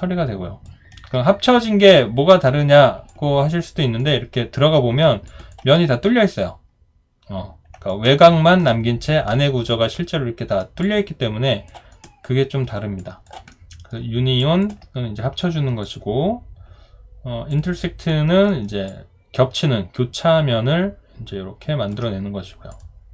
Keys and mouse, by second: 3.1 alt+click, 4.0 alt+right click, 5.3 alt+click, 7.9 alt+right click, 9.7 alt+right click, 10.8 alt+click, 11.9 alt+right click, 13.0 alt+click, 13.5 alt+middle click, 14.4 alt+click, 18.1 alt+right click, 18.5 alt+middle click, 18.9 alt+click.